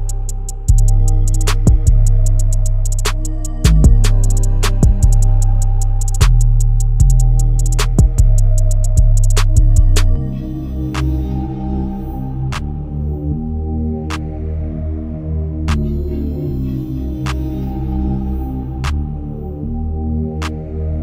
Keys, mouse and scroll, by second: 7.9 click, 17.5 click.